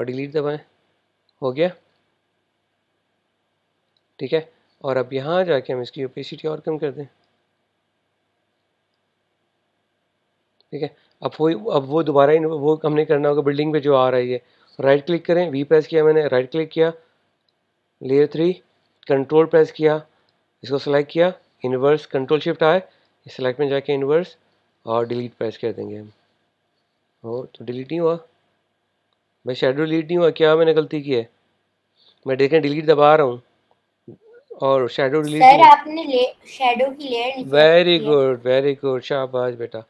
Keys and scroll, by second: 0.4 BackSpace, 15.3 v, 25.9 BackSpace, 32.7 BackSpace.